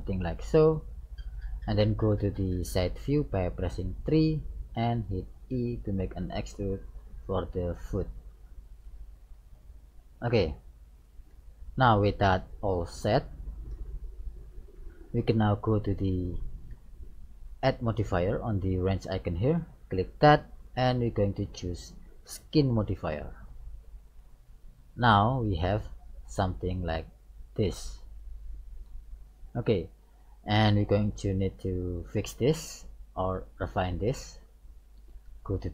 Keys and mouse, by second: 4.0 KP_3, 5.5 e, 9.6-11.5 middle drag, 13.7 KP_1, 20.2-22.3 drag, 24.9-27.0 middle drag, 30.7-34.5 middle drag, 35.3 KP_1.